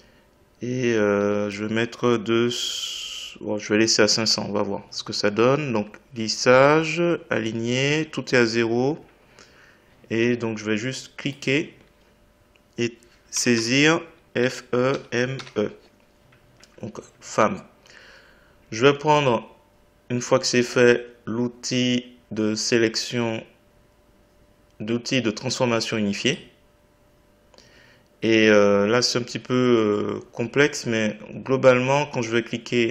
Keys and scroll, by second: 4.2 Return.